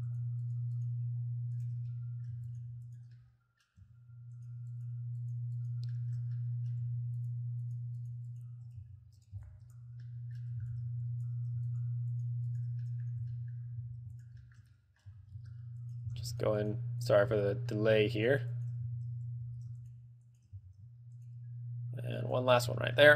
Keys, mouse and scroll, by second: 0.3 shift+right click, 0.8 shift+right click, 1.1 shift+right click, 1.8 shift+right click, 2.1 middle click, 2.7 shift+right click, 3.1 shift+right click, 3.4 middle click, 4.6 shift+right click, 5.0 shift+right click, 5.5 shift+right click, 5.8 shift+right click, 6.2 shift+middle click, 6.6 middle click, 7.5 shift+right click, 7.9 shift+right click, 8.2 shift+right click, 8.5 shift+right click, 9.6 b, 10.3 middle click, 10.8 b, 11.6 b, 11.9 shift+right click, 12.4 shift+right click, 12.8 shift+right click, 13.1 middle click, 13.8 b, 14.0 z, 14.4 shift+right click, 14.7 shift+middle click, 14.9 middle click, 15.3 z, 16.0 shift+right click, 16.3 z, 16.5 shift+right click, 16.9 shift+right click, 17.3 shift+right click, 17.6 middle click, 18.4 shift+right click, 18.7 shift+right click, 19.1 z, 19.6 z, 20.0 shift+right click, 20.5 shift+right click, 20.8 z, 21.4 shift+right click, 22.4 shift+right click, 23.0 shift+middle click.